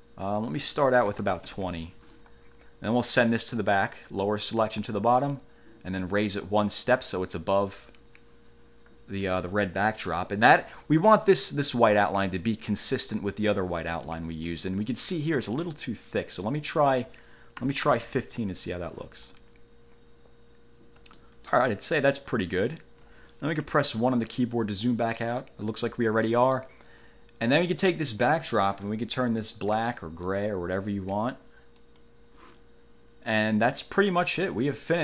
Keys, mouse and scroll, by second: 1.0-1.9 typing, 5.2 click, 7.2 click, 13.4 ctrl+scroll up 2, 14.2 ctrl+middle click, 14.6 click, 16.4 click, 17.5-18.5 typing, 19.4-19.8 ctrl+scroll down 2, 20.1-20.4 ctrl+scroll up 2, 21.3 ctrl+middle click, 22.4 click, 23.8 1, 24.4-25.8 middle drag, 26.4 middle click, 28.0 click, 29.8 click, 30.4 click, 30.9 click, 32.0 click, 34.2 middle click.